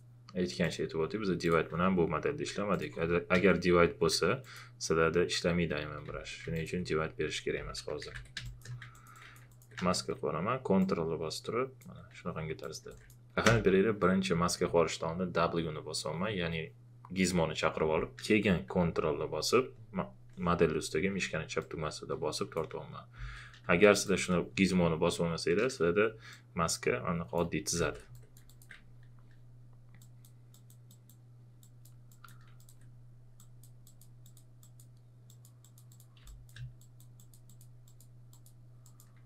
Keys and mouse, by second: 2.7 alt+click, 3.3 ctrl+d, 4.4 click, 6.0 ctrl+z, 6.5 alt+click, 7.3-8.6 typing, 8.8 click, 8.9 alt+click, 9.5 alt+click, 9.8 w, 10.8-12.1 ctrl+drag, 12.1 q, 12.6 click, 13.4 w, 21.6-23.1 ctrl+drag, 23.1 ctrl+z, 23.6 q, 24.0 click, 26.3-27.7 ctrl+drag, 27.7 ctrl+z, 28.1 alt+click, 32.6 ctrl+click, 36.2 space, 36.2 click.